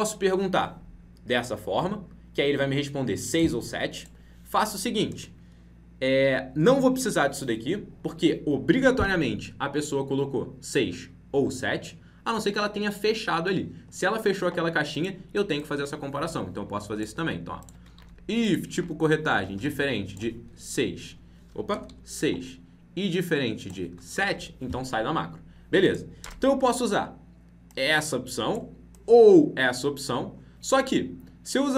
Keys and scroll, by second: 17.9 ctrl+c, 18.7 ctrl+v.